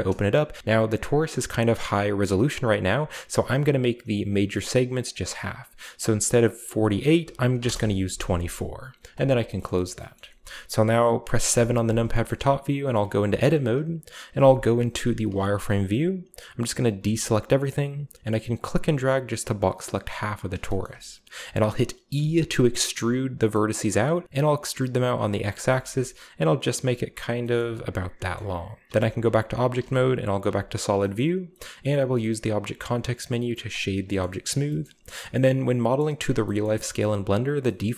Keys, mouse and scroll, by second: 0.5 g, 0.6-0.9 middle drag, 0.6-1.2 scroll up 1, 5.0 click, 7.2 2, 7.5 4, 7.6 Return, 9.1-9.7 drag, 9.5-11.4 shift+middle drag, 9.9-11.4 shift+scroll down 1, 11.4 KP_7, 12.8 Tab, 14.3-15.1 z, 16.9 a, 18.5-20.3 drag, 20.4-21.5 scroll down 1, 20.6-22.1 shift+middle drag, 21.5-22.2 scroll up 1, 22.1 e, 23.4 middle click, 23.7 middle click, 25.1 click, 25.4-26.1 scroll down 1, 25.6 middle click, 25.6 g, 26.6 click, 27.3 g, 27.5 middle click, 27.7 click, 27.9-28.9 shift+middle drag, 27.9-28.4 scroll down 1, 28.8 shift+scroll up 1, 28.9 Tab, 29.7-31.8 typing, 31.1-32.1 middle drag, 31.1-32.1 scroll up 1, 33.6 click, 34.6 shift+middle click, 34.7-35.2 scroll up 1, 34.8-35.2 shift+middle drag, 35.2-35.8 scroll down 1, 35.8-37.9 scroll up 1, 36.0 middle click, 36.6-37.5 shift+middle drag, 37.8 middle click.